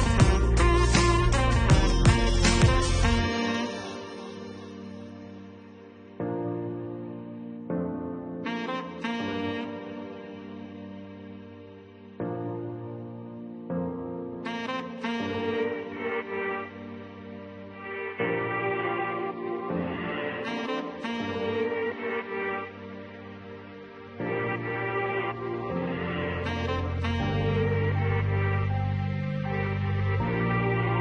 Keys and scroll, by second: 0.5 7, 1.1 0, 1.3 9, 22.7-23.9 typing, 27.1-28.4 typing.